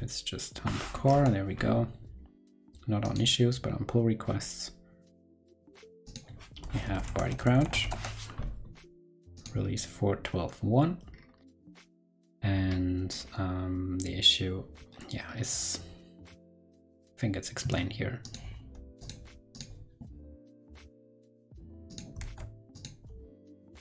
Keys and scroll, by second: 18.7 super+c, 22.1 super+v.